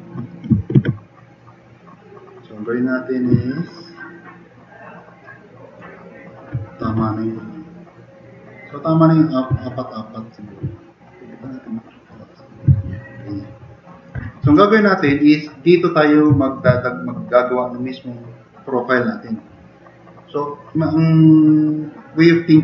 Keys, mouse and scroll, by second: 0.8 ctrl+z, 3.4 drag, 5.0-5.8 drag, 9.7-10.0 drag, 10.1 click, 12.9 click, 13.8 drag.